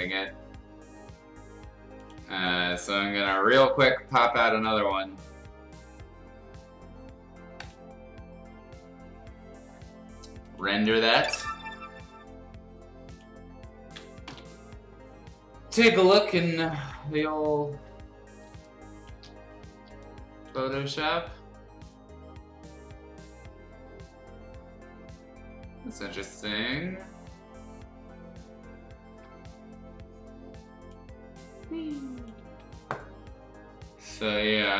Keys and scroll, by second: 14.2 ctrl+o, 18.5 space, 19.9 space, 32.4 ctrl+z.